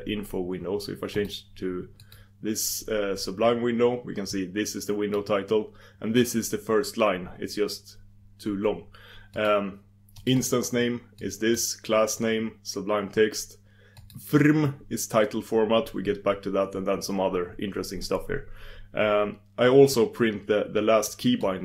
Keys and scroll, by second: 2.0 super+d.